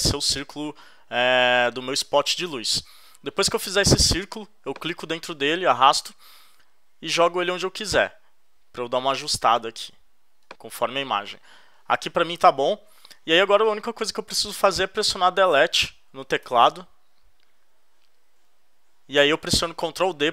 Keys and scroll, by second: 16.4 BackSpace.